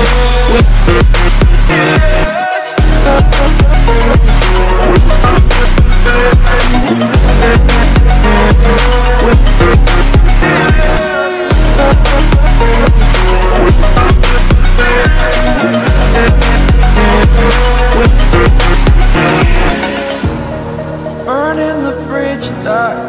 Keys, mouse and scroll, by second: 0.5 space, 0.8 alt+scroll up 1, 1.2 click, 8.1 ctrl+alt+scroll down 1, 9.8 click, 11.8 a, 16.0 click.